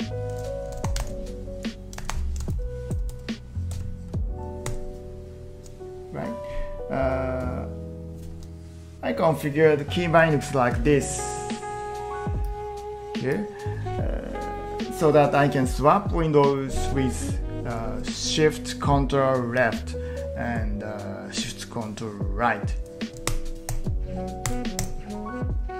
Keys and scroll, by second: 0.8 ctrl+t, 0.9 p, 1.0 ctrl+t, 2.0 ctrl+t, 2.5 ctrl+shift+Right, 3.0 ctrl+shift+Right, 3.1 ctrl+shift+Right, 3.8 ctrl+shift+Right, 4.7 ctrl+shift+Left, 23.3 ctrl+shift+Left, 23.7 ctrl+shift+Right, 24.5 ctrl+shift+Left, 24.8 ctrl+shift+Right.